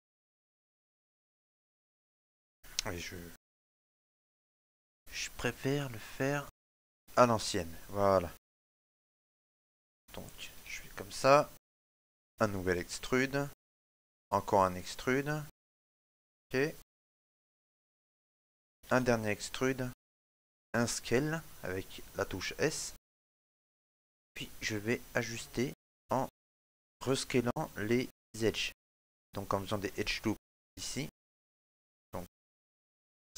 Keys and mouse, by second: 4.5 click, 4.6 shift+middle click, 6.5 click, 7.6 right click, 8.2 shift+middle click, 9.7 s, 11.5 shift+middle click, 12.7 e, 17.3 shift+middle click, 19.6 e, 21.4 s, 23.2 click, 24.1 shift+middle click, 24.2 middle click, 24.7 shift+middle click, 25.8 click, 25.8 shift+middle click, 26.1 middle click, 26.7 shift+middle click, 27.1 middle click, 29.9 right click, 31.4 alt+shift+right click, 31.5 middle click, 33.1 s.